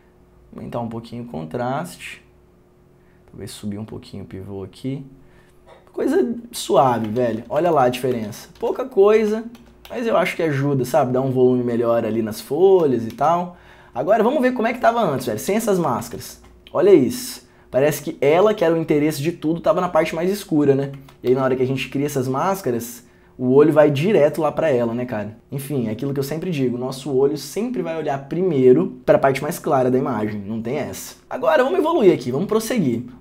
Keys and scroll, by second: 7.4 ctrl+d, 10.1 ctrl+d, 13.0 ctrl+d, 13.3 ctrl+d, 21.5 ctrl+d.